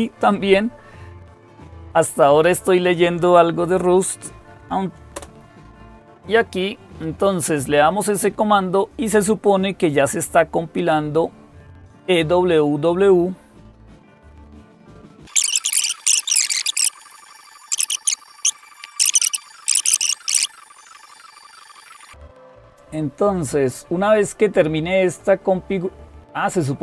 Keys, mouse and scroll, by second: 5.0 Return, 16.2 click, 16.9 click, 22.3-23.8 scroll down 1, 23.8-25.1 scroll down 1.